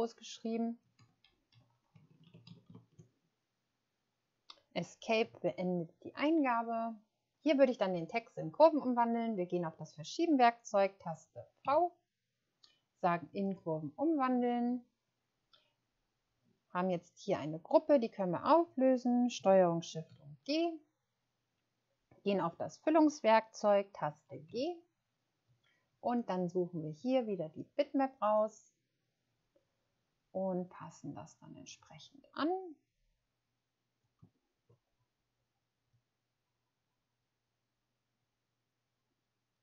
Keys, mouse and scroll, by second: 0.9 Delete, 1.2 Delete, 1.4 Delete, 2.4-3.1 typing, 5.1 Escape, 11.6 v, 24.4 g, 28.2 click, 34.5-34.8 ctrl+scroll up 2.